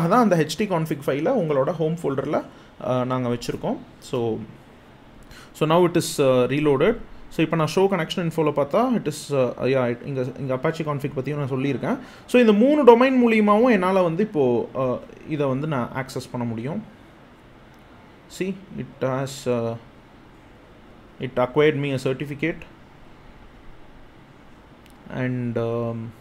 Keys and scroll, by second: 13.3 super+c, 14.9 super+v, 15.9 Return.